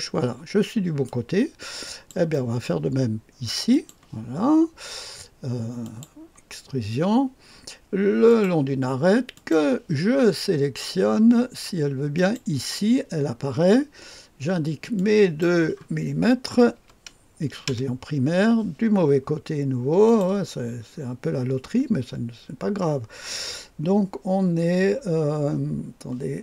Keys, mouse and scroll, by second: 2.3 right click, 3.7 click, 5.8 click, 8.2 click, 9.3 click, 12.1 click, 12.7 click, 14.9-16.1 drag, 16.7 KP_2, 17.6 Return, 20.0 click, 20.6 scroll down 1.